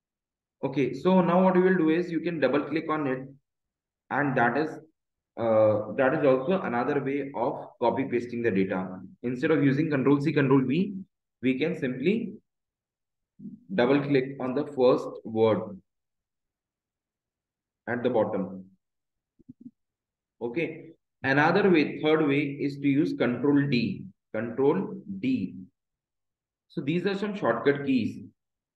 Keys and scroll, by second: 15.6 ctrl+z, 22.6 shift+Down, 23.6 shift+Up.